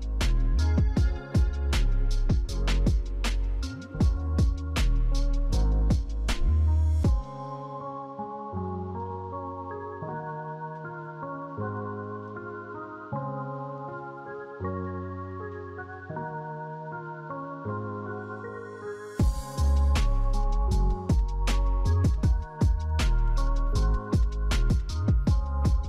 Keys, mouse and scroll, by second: 0.2 right click, 9.6 right click.